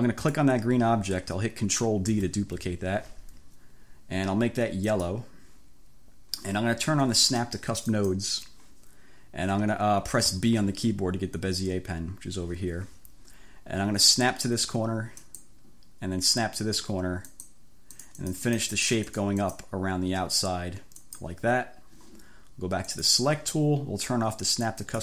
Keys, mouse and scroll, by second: 0.3 click, 2.2 ctrl+d, 5.0 click, 8.0 click, 10.4 b, 15.2 click, 17.3 click, 18.0-19.8 drag, 21.1 click, 23.0 click, 24.8 click.